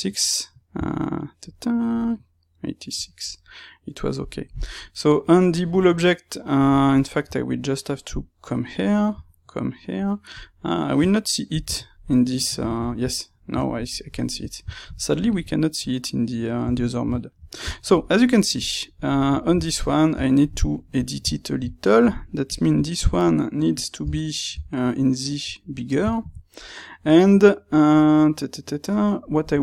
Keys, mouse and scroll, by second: 8.2 space, 9.0 space, 10.4 click, 11.4 KP_Divide, 11.9-22.4 middle drag, 20.2 Tab, 22.4 click, 24.0 g, 26.0-29.6 ctrl+middle drag, 29.4 Tab.